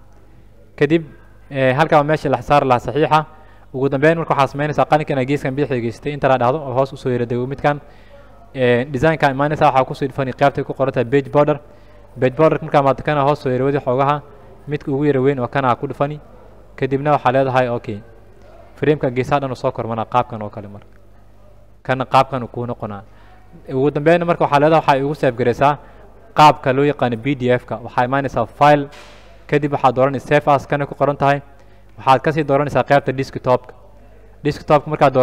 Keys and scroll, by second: 6.4 Return.